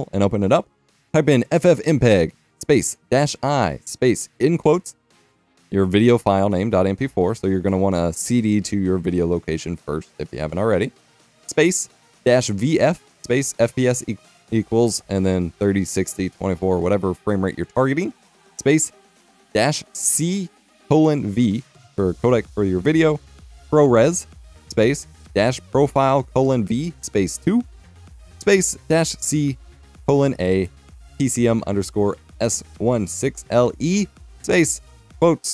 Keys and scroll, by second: 1.0 F12, 1.0-7.0 typing, 8.9-14.0 typing, 15.0-15.9 typing, 17.9-20.1 typing, 21.4-27.4 typing, 28.7-30.9 typing, 32.3-35.5 typing.